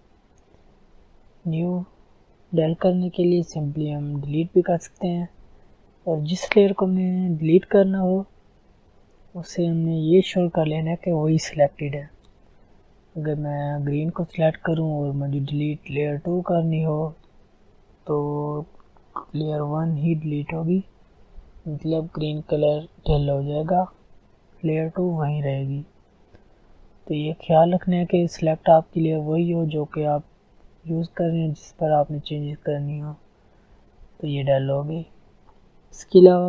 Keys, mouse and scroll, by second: 0.0 click, 13.6 click, 24.4 ctrl+z, 30.1 ctrl+z, 31.6 click.